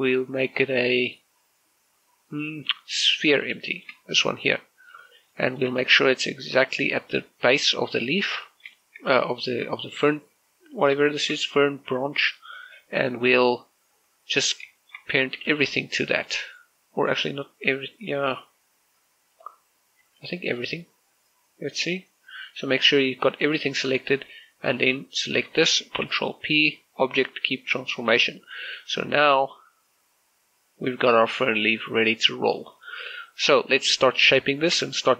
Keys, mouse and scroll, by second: 4.2 click, 4.5 shift+middle click, 4.7 scroll up 1, 5.6-6.1 scroll down 1, 6.1 shift+middle click, 6.7 middle click, 6.9 scroll up 1, 9.3 shift+middle click, 9.5 scroll up 1, 11.9 shift+middle click, 15.3 scroll down 1, 15.6 shift+middle click, 16.0 a, 16.3 b, 16.5-18.9 drag, 18.9 b, 20.1 right click, 20.8 b, 21.0-24.0 drag, 25.3 click, 25.7 shift+right click, 26.8 ctrl+p, 27.9 click, 28.9 right click, 29.5 r, 29.9 r, 32.7 right click, 33.8 middle click, 34.5-34.9 scroll up 1, 34.9 scroll down 1.